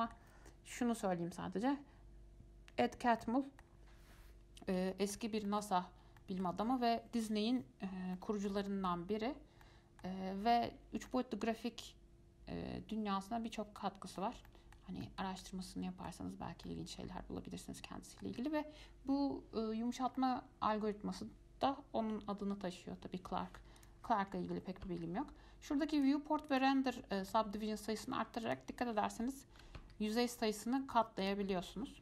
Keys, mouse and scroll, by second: 0.1-3.2 middle drag, 3.4-6.1 middle drag, 6.1 scroll up 1, 6.4-9.2 shift+middle drag, 9.2-9.6 scroll down 1, 9.6 scroll up 1, 9.8 middle click, 10.7-11.3 scroll down 1, 11.3-14.3 middle drag, 14.7-16.6 middle drag, 16.6 scroll up 1, 16.9-19.9 middle drag, 20.4-23.4 middle drag, 24.0-26.8 drag, 27.5-28.7 middle drag, 28.7-32.0 drag.